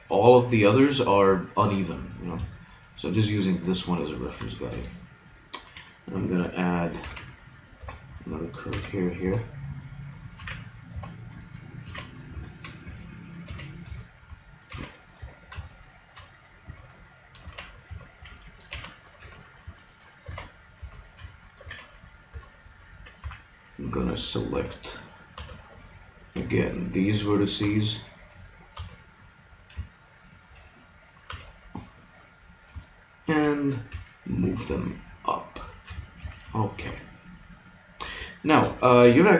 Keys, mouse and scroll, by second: 2.5 click, 2.7 middle click, 7.1 ctrl+r, 8.7 ctrl+r, 10.3 ctrl+r, 11.8 ctrl+r, 13.5 ctrl+r, 14.7 ctrl+r, 17.4 ctrl+r, 18.7 ctrl+r, 20.3 ctrl+r, 21.6 ctrl+r, 23.2 a, 24.5 b, 25.3 b, 26.3 b, 27.7 b, 28.7 b, 31.3 b, 33.9 g, 36.2 a.